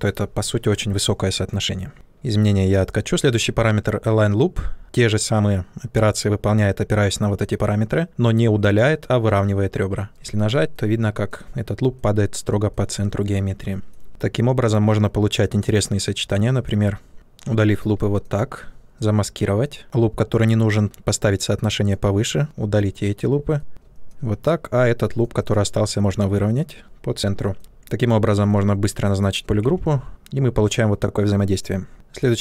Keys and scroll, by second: 1.9 ctrl+z, 29.5 ctrl+w.